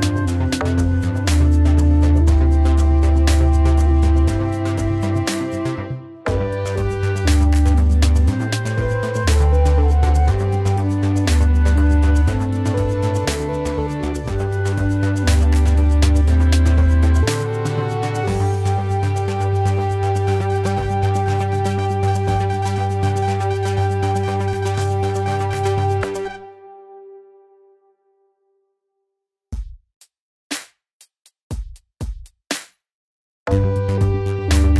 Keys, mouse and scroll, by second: 10.4 typing.